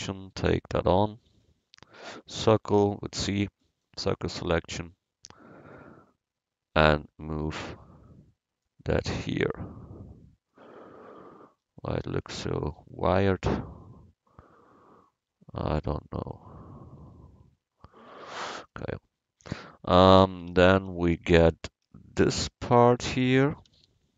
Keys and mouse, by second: 1.3 a, 1.7 c, 9.0-10.5 middle drag, 11.9 Tab, 12.3 Tab, 17.0 Tab, 17.4 Tab, 18.9 KP_1, 20.5 Tab, 20.8 a, 21.3 Tab, 22.2 a, 23.7 c.